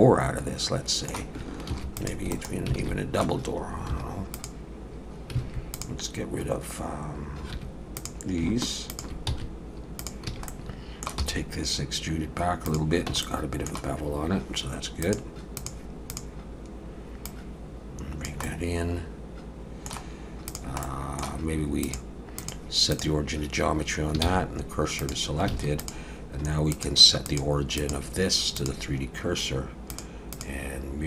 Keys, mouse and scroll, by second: 1.7 ctrl+r, 2.8 alt+a, 3.9 2, 4.3 click, 5.7 click, 7.5 1, 8.0 click, 8.9 shift+click, 9.3 x, 10.3 a, 10.5 middle click, 11.2 e, 13.1 Tab, 13.2 middle click, 15.0 click, 17.2 click, 18.4 middle click, 20.0 scroll down 2, 20.5 click, 20.8 middle click, 21.8 click, 24.2 shift+s, 25.5 alt+a, 25.8 click, 26.7 click, 29.9 click, 30.3 click.